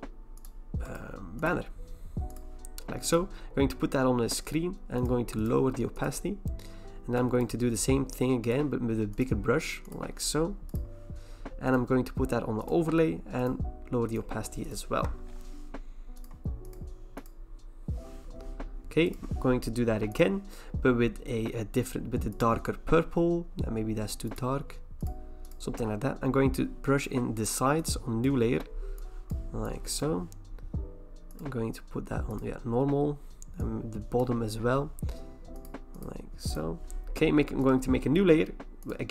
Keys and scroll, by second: 15.0 Return.